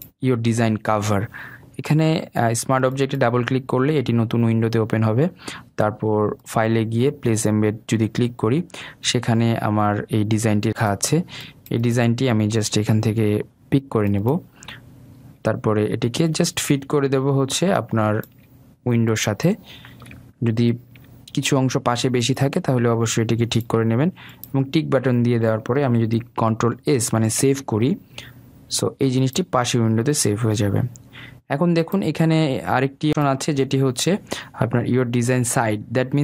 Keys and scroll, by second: 22.2 ctrl+t, 28.5 ctrl+s.